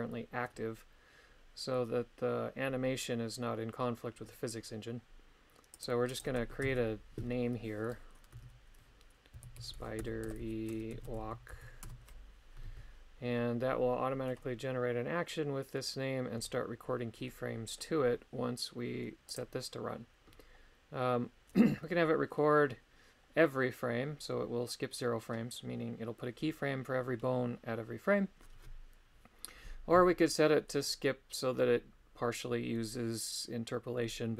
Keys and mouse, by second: 17.3 middle click, 19.3 click.